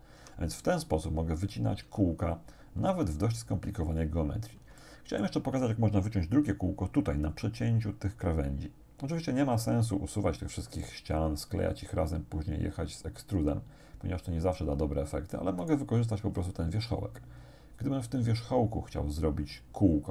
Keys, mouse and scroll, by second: 0.2 Tab, 1.9 Tab, 4.8 shift+click, 15.7 right click, 16.3-16.9 scroll up 2.